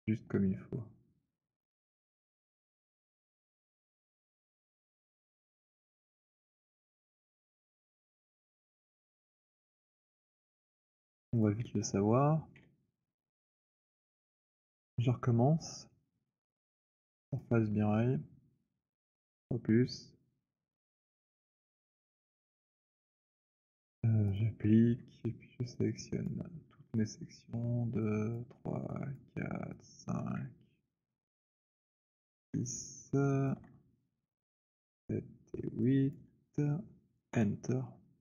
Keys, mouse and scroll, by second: 1.1 click, 3.1 alt+click, 5.1 click, 7.4 click, 8.9 click, 9.2 alt+click, 11.4 click, 12.5 Delete, 13.1 scroll, 13.9 alt+click, 14.7 alt+middle click, 17.5 click, 21.1 click, 24.4 click, 27.5 shift+click, 28.6 click, 29.6 click, 29.8 shift+click, 31.1 alt+click, 32.2 shift+click, 32.8 alt+middle click, 33.4 alt+click, 34.8 shift+click, 35.6 shift+click, 36.3 shift+click, 37.3 Return.